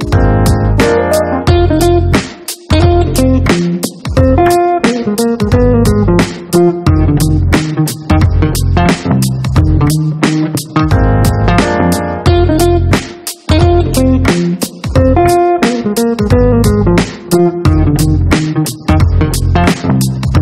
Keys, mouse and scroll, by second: 2.1 click, 5.8 click, 7.5 click, 9.7 click, 14.4 click, 17.8-19.5 drag, 20.1 right click.